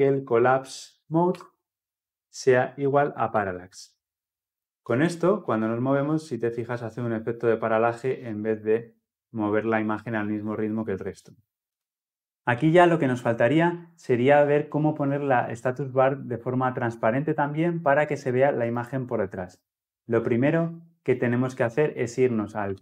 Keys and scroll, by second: 1.0 Return, 11.6 ctrl+z.